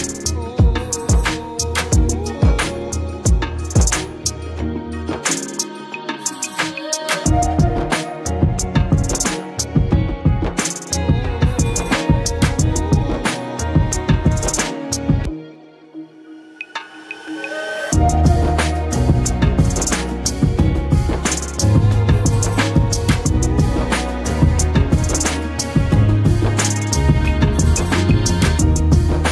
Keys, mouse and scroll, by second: 2.9 Return, 4.2 click, 6.3 click, 9.5 click, 11.3 click, 15.5-16.5 scroll down 1, 16.5 click, 19.1-19.5 drag, 23.6-26.5 shift+drag, 29.2 ctrl+z.